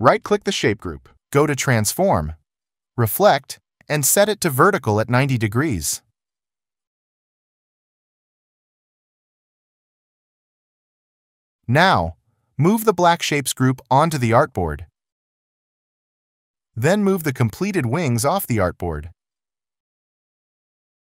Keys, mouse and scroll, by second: 7.9 shift+click.